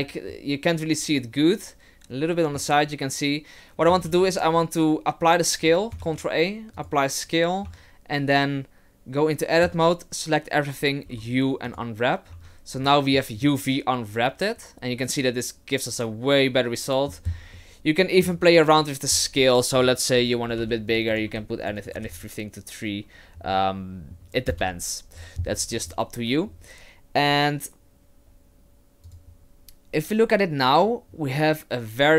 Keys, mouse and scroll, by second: 0.3 middle click, 4.0 ctrl+a, 6.0 ctrl+a, 7.7 Tab, 9.6 a, 11.1 u, 12.3 Tab, 12.8 middle click, 13.4 middle click, 17.6 middle click, 19.8 click, 21.1 click, 21.8 click, 23.5 middle click, 24.5 KP_0, 25.5-26.5 scroll up 7, 26.5-27.2 scroll down 2, 27.2-27.5 scroll down 1, 29.1 click, 30.9-31.4 scroll up 2.